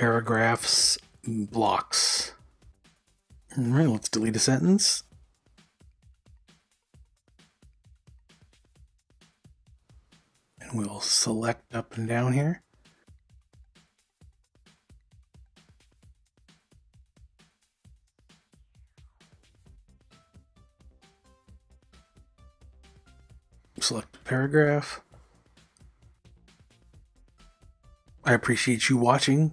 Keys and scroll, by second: 0.6 v, 3.2 d, 6.1 u, 10.3-11.7 typing, 13.6-14.7 typing, 19.5-20.4 typing, 23.7 typing.